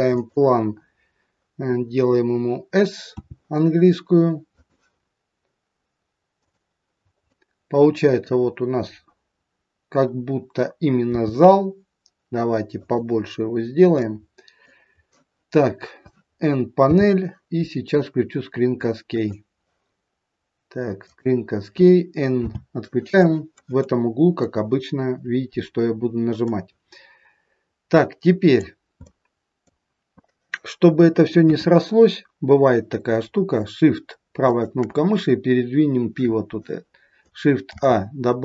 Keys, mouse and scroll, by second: 22.4 n, 26.4 middle click, 29.0 middle click, 31.3 KP_3, 34.4 shift+right click, 37.7 shift+a.